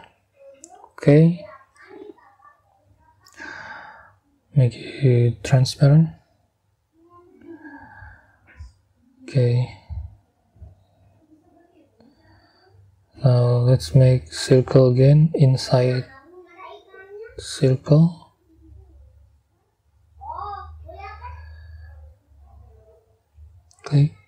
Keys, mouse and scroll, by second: 1.2 click, 5.3 click, 6.8 middle click, 7.4 middle click, 13.6 middle click, 14.7-15.1 scroll up 2, 20.5 click, 21.1-21.6 scroll down 1, 23.5 click.